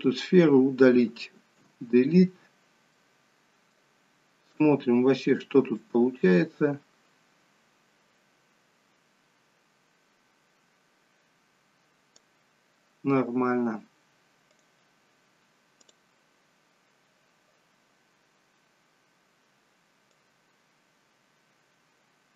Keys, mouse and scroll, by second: 1.6 Delete, 2.9 middle click, 4.6 click, 6.0 click, 14.6 click, 15.9 click, 20.2 click.